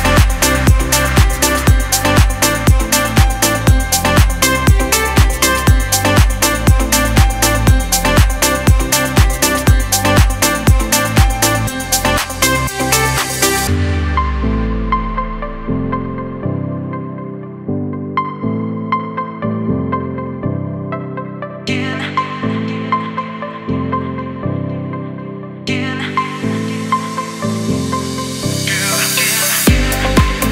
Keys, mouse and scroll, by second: 6.3 click, 8.7-30.5 drag.